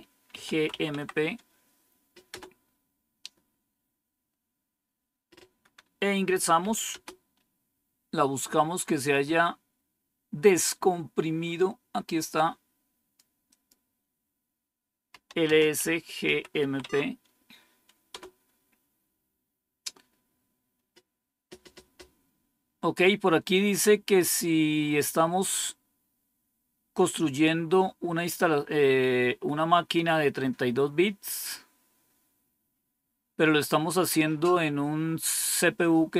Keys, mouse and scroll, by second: 0.0-1.1 typing, 6.3-7.1 typing, 8.7 scroll up 1, 9.3 typing, 10.8-11.5 scroll up 1, 11.5-12.2 scroll up 1, 12.2 click, 13.4 click, 15.0-18.0 typing.